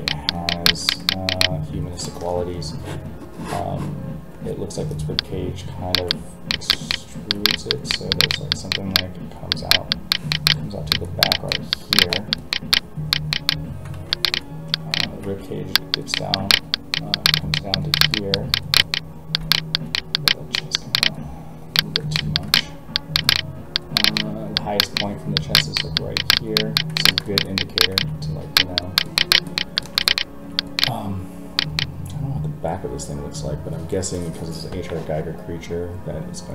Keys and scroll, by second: 13.9 ctrl+z, 15.2 alt+a.